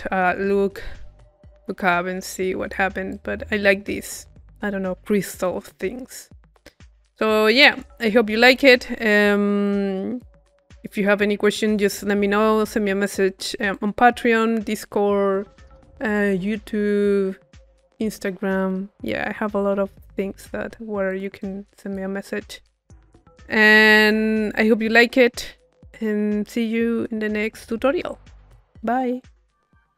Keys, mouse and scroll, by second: 1.9-4.0 drag, 7.0-8.2 drag, 8.2-9.6 middle drag, 9.6-10.6 right drag, 10.6-12.1 drag, 12.5 right click, 13.7-15.1 drag, 21.1-22.4 drag, 21.4 middle click, 21.4 right click, 22.7 click, 23.5 middle click, 24.1 click, 25.1-27.4 drag.